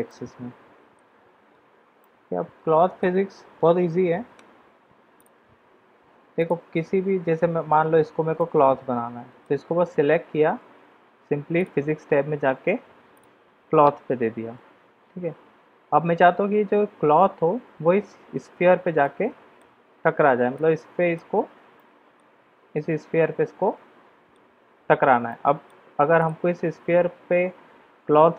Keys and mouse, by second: 0.0-1.2 middle drag, 1.9-3.0 middle drag, 5.2 click, 6.3 click, 8.3-9.5 middle drag, 11.5 click, 19.0-19.5 middle drag, 20.5-21.1 middle drag, 21.7 middle click, 22.7-24.3 middle drag, 25.3 middle click.